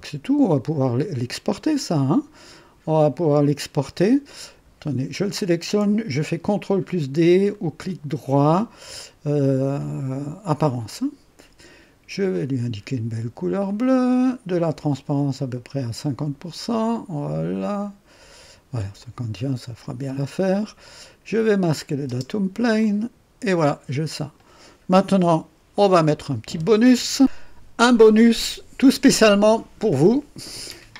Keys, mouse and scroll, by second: 0.1 right click, 0.8-4.1 drag, 5.1 click, 7.5 right click, 10.9 click, 12.3 click, 13.6 click, 14.9-18.5 drag, 19.0 click, 19.8 click, 21.7 click, 22.0 space, 22.8-24.6 drag, 25.1 1, 25.7-26.5 right drag.